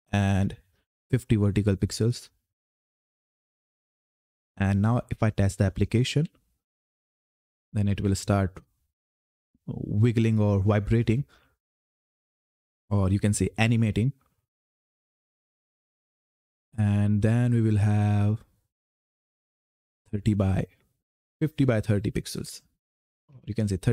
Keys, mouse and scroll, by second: 0.0 click, 3.4 ctrl+F10, 5.8-8.2 typing, 9.8 typing, 11.0 typing, 12.1 typing, 19.8-23.9 typing.